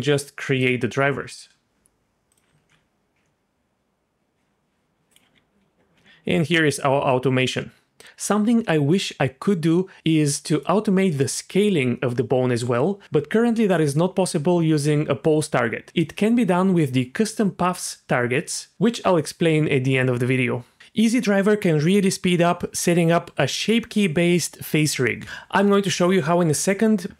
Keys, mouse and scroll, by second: 0.6 click, 2.3 click, 2.6 alt+r, 3.2 r, 5.9 r, 8.0 click, 8.7-10.3 drag, 10.5-12.4 drag, 20.9 click, 21.7 click, 22.9 g.